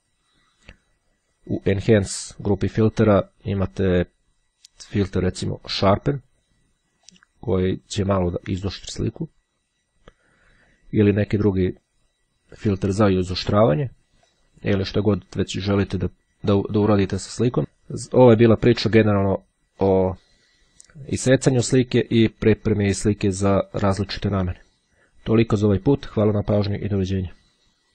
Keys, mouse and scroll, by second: 6.8-7.8 drag, 9.0-11.0 drag, 13.8-15.0 drag, 16.2 click.